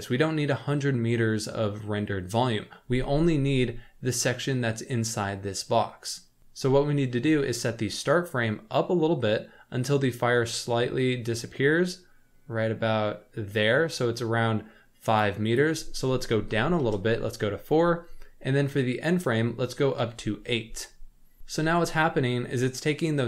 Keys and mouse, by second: 3.5-4.6 middle drag, 6.4 KP_0, 8.1-15.4 drag, 15.6-17.0 drag, 19.0-20.6 drag.